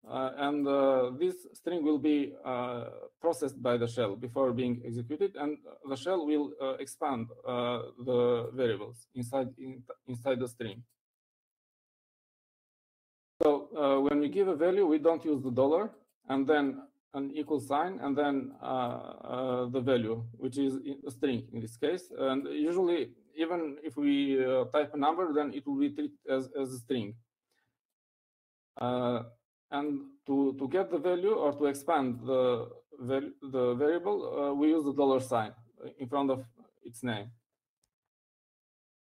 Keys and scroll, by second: 38.9-39.1 typing.